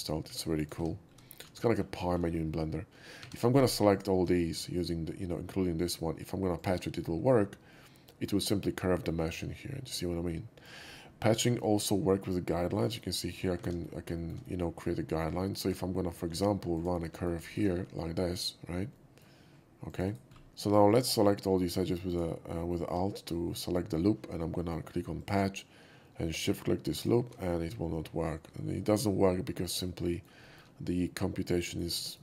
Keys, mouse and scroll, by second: 0.0-1.6 typing, 0.5 click, 1.1 middle click, 1.2 middle drag, 1.6 middle click, 2.0 scroll down 1, 2.2 scroll up 1, 3.2 2, 3.8 alt+2, 3.9 click, 6.5 alt+click, 7.7 middle click, 9.9 middle click, 11.4 scroll up 1, 13.6 ctrl+z, 13.8 scroll up 1, 14.1 ctrl+shift+z, 14.1 middle click, 15.6 click, 16.7 shift+click, 17.1 alt+middle click, 17.4 middle click, 18.3 alt+click, 18.9 alt+middle drag, 19.8 alt+click, 20.0 alt+right click, 20.3 scroll down 1, 20.5 ctrl+z, 21.0 click, 22.0 alt+click, 23.9 alt+middle click, 25.1 alt+click, 26.9 shift+click, 29.8-30.2 shift+middle drag, 30.4 middle drag, 31.0-31.7 middle drag, 32.0 shift+middle click.